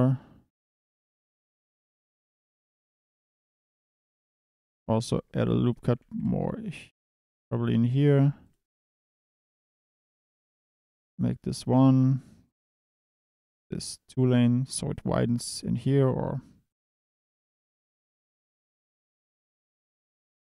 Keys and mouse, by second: 0.5 click, 1.7 click, 2.3 click, 3.1 Tab, 3.4 click, 4.2 Tab, 5.0 1, 5.4 ctrl+r, 5.6 click, 5.9 g, 6.2 g, 8.1 2, 9.8 click, 12.8 click, 13.7-15.6 drag, 16.7 click, 17.0-18.0 drag, 18.5 1, 19.0 g, 19.7 click, 19.9 Tab.